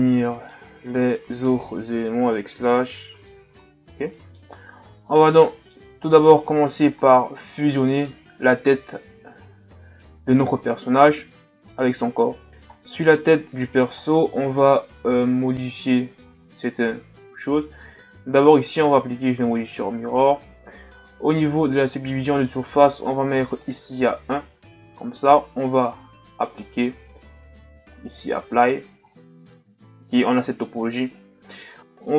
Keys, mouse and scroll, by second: 2.2 KP_Divide, 3.1 Tab, 3.6 a, 3.8-4.1 scroll down 4, 4.1-5.1 middle drag, 5.1-5.4 ctrl+scroll down 1, 5.4-5.9 middle drag, 5.9-6.3 scroll up 4, 6.3-7.0 shift+scroll down 6, 7.1 ctrl+scroll down 2, 7.3-10.6 middle drag, 10.6-11.9 scroll up 5, 12.5 shift+scroll up 1, 12.8-15.9 scroll down 2, 18.8-28.5 drag, 28.5 Tab, 29.1-32.0 middle drag, 32.0 KP_1.